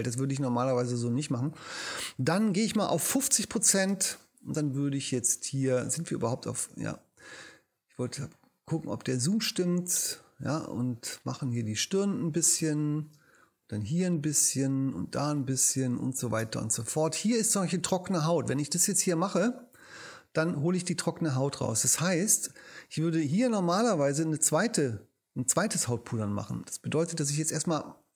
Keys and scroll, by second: 3.2 5, 3.9 space, 4.9 ctrl+alt+space, 6.2 ctrl+alt+super+0, 6.7 alt+super+0, 12.6 space, 16.4 space.